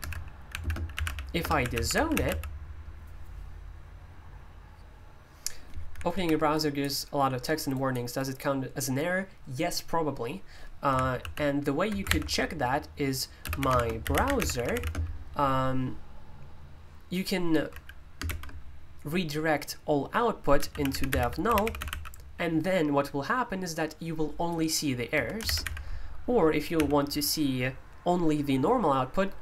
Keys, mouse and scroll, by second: 0.0-2.7 typing, 7.3-10.8 drag, 12.1 ctrl+u, 13.1-15.2 typing, 20.4-22.3 typing, 25.1 Escape, 25.2-26.7 typing.